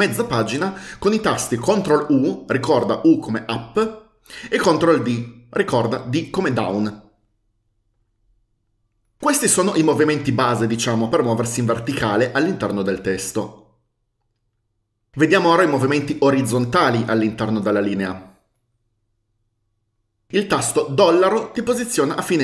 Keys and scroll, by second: 2.2 ctrl+u, 5.3 ctrl+d, 21.2 shift+4.